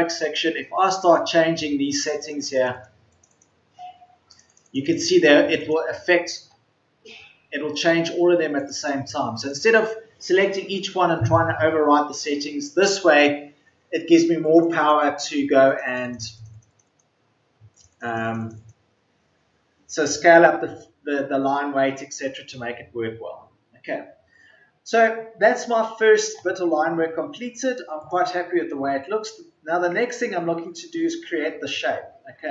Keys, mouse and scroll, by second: 4.4 Return.